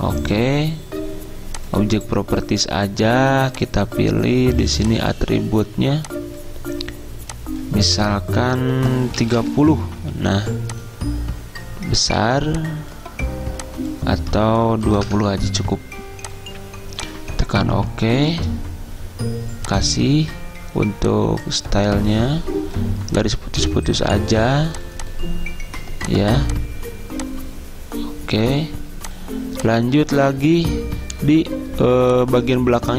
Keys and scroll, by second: 9.4 typing, 14.8-15.5 typing.